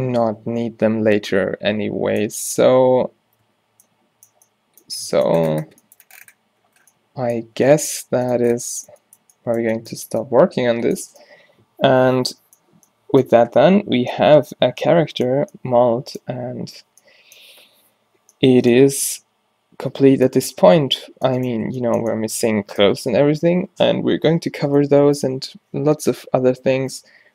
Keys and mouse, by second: 3.9-27.3 middle drag.